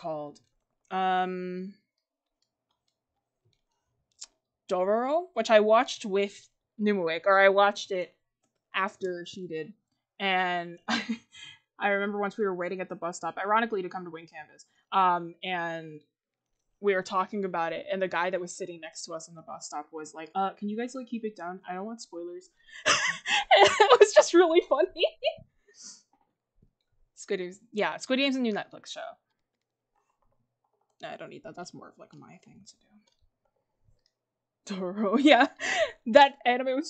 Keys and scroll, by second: 4.9 ctrl+z.